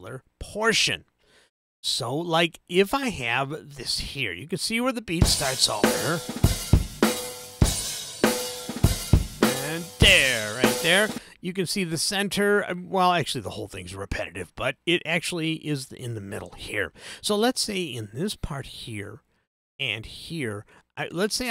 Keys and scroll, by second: 5.1 space, 11.1 space.